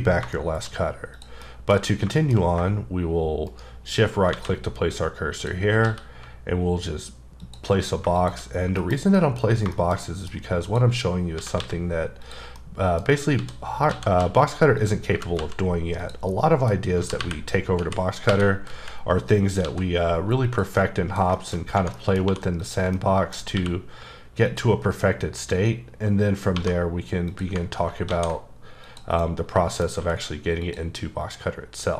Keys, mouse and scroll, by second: 0.3 shift+middle click, 1.2 click, 1.4 middle click, 1.8-2.5 scroll up 4, 2.1 shift+middle click, 2.5-3.5 scroll down 2, 3.5 shift+right click, 4.3 shift+a, 5.3 click, 5.8 s, 7.4 click, 8.8 KP_Decimal, 9.1 middle click, 9.4 scroll up 3, 9.7 middle click, 10.0 double middle click, 10.6 click, 11.4 s, 12.2 click, 12.6 middle click, 13.1 scroll down 2, 13.4-15.4 typing, 14.8 click, 16.0 click, 16.3 middle click, 17.0-19.6 typing, 20.4 click, 20.8 middle click, 21.3 shift+middle click, 21.6 scroll up 2, 21.9 middle click, 22.2 2, 22.6 click, 22.9 middle click, 23.5 q, 24.5 ctrl+click, 25.3-26.5 scroll up 8, 26.5 1, 27.3 click, 27.7 scroll down 2, 28.1 ctrl+a, 28.9 click, 29.2 middle click, 30.0 q, 30.6 click.